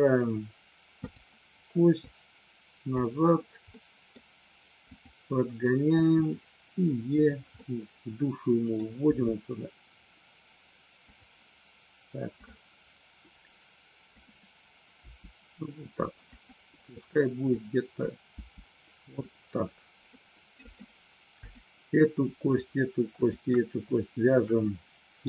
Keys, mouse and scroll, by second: 1.0 click, 2.0 click, 3.8 middle click, 4.9 click, 5.9 e, 7.2 click, 7.6-8.8 middle drag, 9.2 e, 11.0 click, 14.2 click, 15.0 g, 16.3 click, 17.5 click, 18.3 g, 19.0 click, 20.2 middle click, 21.4 click, 22.4 shift+click, 23.2 shift+click, 24.6 middle click.